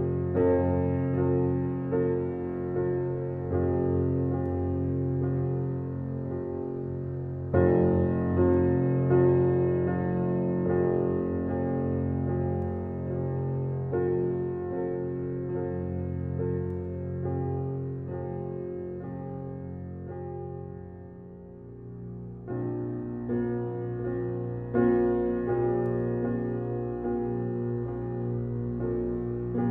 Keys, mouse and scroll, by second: 1.5 alt+right click, 2.1 alt+click, 2.4 alt+right click, 2.8 alt+middle click, 3.2 click, 3.6 e, 4.4 click, 4.8 w, 5.5-6.8 drag, 6.9 click, 7.7 alt+right click, 8.0 alt+middle click, 8.4 alt+click, 9.4 alt+right click, 9.7 alt+middle click, 10.8 click, 10.8 alt+click, 12.9 ctrl+r, 14.3 click, 16.0 ctrl+d, 17.4-18.8 drag, 18.8 r, 19.9-21.9 drag, 21.9-24.7 alt+drag, 24.7 w, 25.1 click, 25.8-28.8 alt+drag, 29.0 alt+right click.